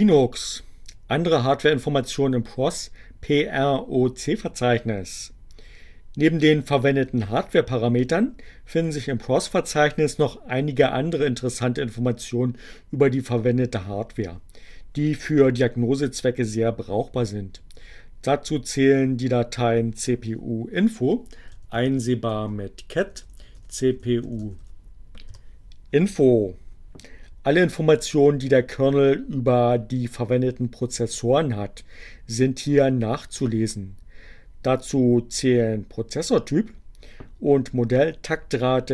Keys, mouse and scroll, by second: 19.4 c, 21.6-25.1 typing.